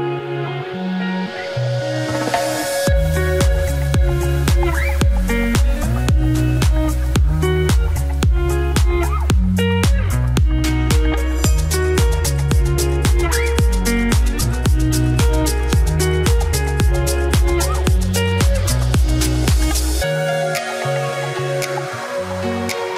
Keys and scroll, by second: 12.4 ctrl+t, 22.7 ctrl+d.